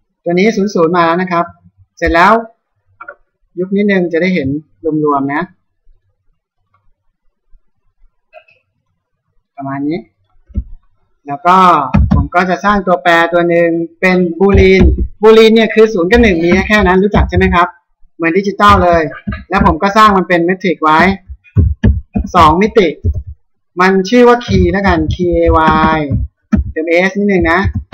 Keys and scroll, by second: 11.5 Return, 16.1 BackSpace.